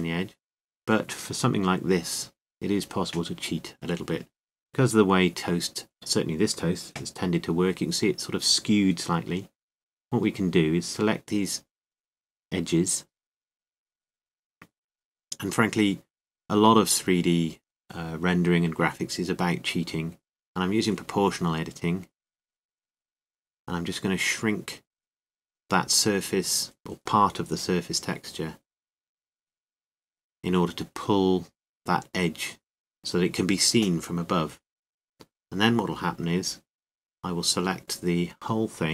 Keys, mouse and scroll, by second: 1.2 a, 2.0 c, 7.4 right click, 7.9 KP_7, 8.9 right click, 11.0-19.4 right drag, 19.4 s, 23.0 o, 27.6 o, 27.6 s, 36.5 KP_7, 37.4 Tab.